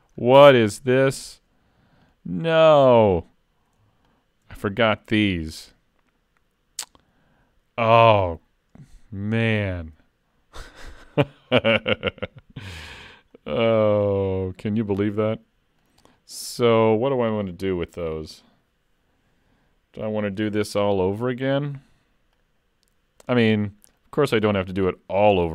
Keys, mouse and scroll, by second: 0.2-0.6 scroll down 3, 0.6 shift+middle click, 1.0 middle click, 2.1 click, 3.2 click, 4.1 shift+click.